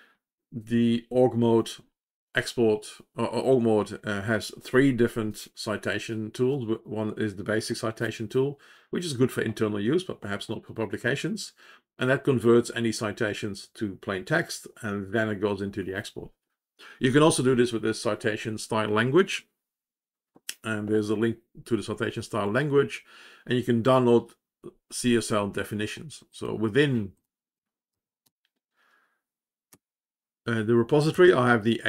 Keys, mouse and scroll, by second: 27.1 click, 27.1 click, 28.2 ctrl+j, 29.6-30.8 Up, 31.0-31.8 Down.